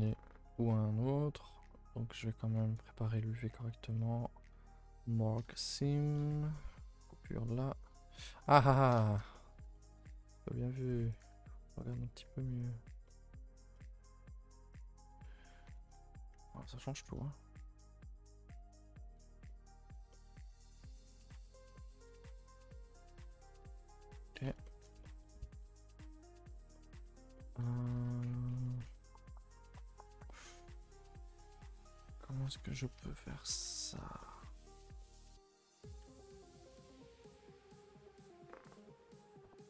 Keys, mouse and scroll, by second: 0.1 alt+click, 0.5-5.1 middle drag, 5.1 right click, 5.7-6.1 scroll down 3, 6.1 middle click, 6.3 a, 6.5-7.5 middle drag, 7.5 scroll down 1, 7.8 middle click, 8.1-8.4 scroll up 1, 8.4 1, 8.7 shift+middle click, 9.2 scroll up 1, 9.3 middle click, 10.1 click, 10.2 g, 11.2 click, 12.1 g, 13.0-14.7 middle drag, 14.7 click, 15.1-15.6 scroll down 1, 15.6 Tab, 15.8 scroll down 1, 15.9 a, 16.0 a, 16.3 middle drag, 16.5 ctrl+s, 16.7 middle drag, 17.2-19.1 middle drag, 19.1-19.4 scroll down 2, 19.4-20.4 middle drag, 20.4-21.3 scroll up 2, 21.3 click, 21.7 middle drag, 21.9-22.2 scroll up 2, 22.1 Tab, 22.2-23.2 middle drag, 23.2-23.6 scroll down 2, 23.6 Tab, 23.7-24.3 middle drag, 24.3 click, 24.4 Tab, 24.6 middle drag, 24.8 a, 24.9 a, 25.0 middle drag, 25.2 2, 25.7 alt+click, 26.0-27.0 middle drag, 27.0 Tab, 27.3 middle drag, 27.6 Tab, 27.9 a, 28.5 a, 28.6 a, 29.2-31.1 middle drag, 31.1 Tab, 31.4-32.1 scroll down 1, 32.1 Tab, 32.4 Tab, 32.7 middle click, 32.9 a, 33.1 a, 33.7-34.2 scroll up 2, 34.2-34.7 shift+middle drag, 34.7 scroll down 1, 35.0-36.0 middle drag, 36.0 Tab, 36.3 a, 36.4 a.